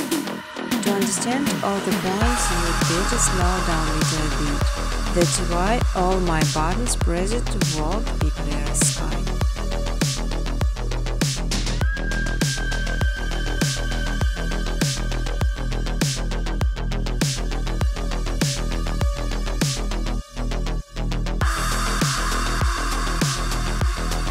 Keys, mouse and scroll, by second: 0.1 click, 0.6 right click, 1.9 click, 4.8-10.4 typing, 11.2 Return, 13.3 click, 13.7 click, 15.2-18.8 typing, 19.8 click, 20.0 click, 22.0 click, 23.3 click.